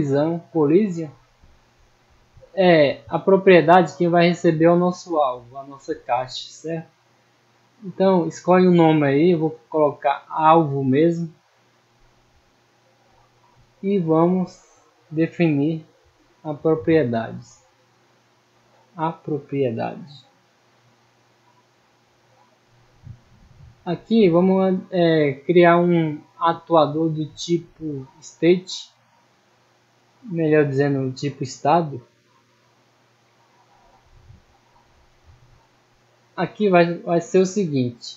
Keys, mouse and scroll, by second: 0.4 middle click, 1.7 click, 2.6 click, 3.1 middle click, 4.1 right click, 5.8 click, 6.8 click, 7.8 click, 10.6 click, 11.2 middle click, 11.2 scroll up 1, 12.5-13.0 middle drag, 13.5 right click, 14.4 middle click, 15.5 click, 18.6 click, 19.7 click, 20.4-21.6 middle drag, 22.2-23.1 scroll down 3, 23.3 middle click, 23.8 scroll up 1, 24.6 middle drag, 25.1 middle drag, 25.5 scroll down 1, 26.4 click, 28.2 click, 29.0 middle click, 29.6 scroll down 1, 30.0 middle click, 31.6-32.6 drag, 32.8 middle click, 33.6-34.0 scroll up 2, 34.0 middle click, 35.4 middle click, 35.9 scroll down 1, 36.4 middle click, 37.1 middle click.